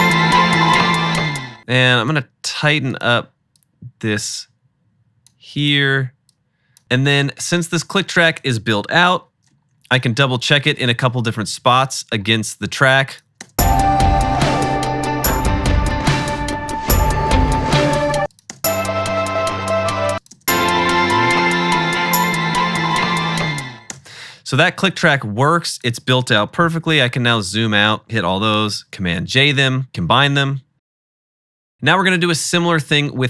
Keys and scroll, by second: 1.6 space, 6.8 super+s, 9.3 -, 13.5 space, 15.7 -, 18.2 space, 18.6 space, 20.1 space, 20.4 space, 24.0 space, 26.8 -, 26.9 -, 28.7 super+j, 31.7 =.